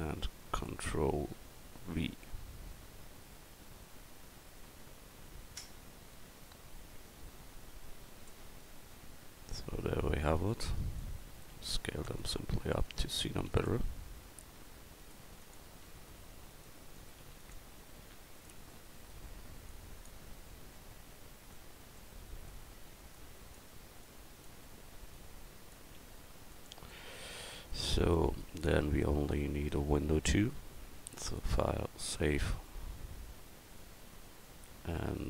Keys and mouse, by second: 2.0 ctrl+v, 6.8 KP_Decimal, 10.4-11.0 drag, 11.6 s, 13.0 right click, 13.4 x, 15.1-19.7 right drag, 15.2 x, 17.2 x, 19.7-20.1 drag, 23.2-25.2 drag, 26.0 s, 29.5 a.